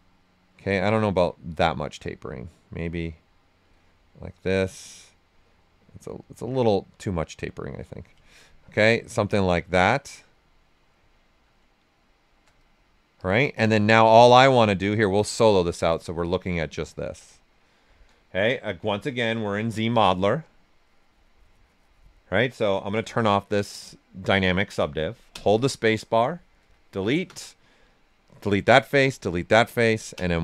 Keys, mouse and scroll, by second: 1.7-4.2 drag, 4.2-5.4 right drag, 5.4-8.2 drag, 8.2 ctrl+right click, 9.1 right click, 9.5 typing, 9.9 right click, 11.5 right click, 12.6 ctrl+right click, 13.1 ctrl+click, 13.7 shift+f, 14.0 right click, 15.2 click, 15.6 alt+right click, 16.1 ctrl+right click, 17.0 s, 17.1 click, 18.6-20.0 typing, 22.9 shift+d, 25.3 space, 26.5 click, 27.8 click, 28.2 right click, 28.9 click, 29.2 right click, 30.1 space.